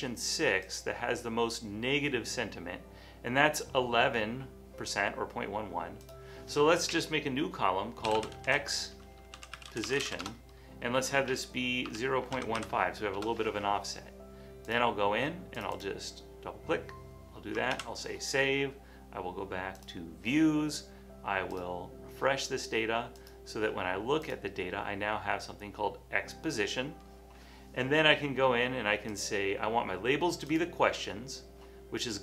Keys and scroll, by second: 8.0-10.6 typing, 11.9-13.2 typing, 17.9 super+s.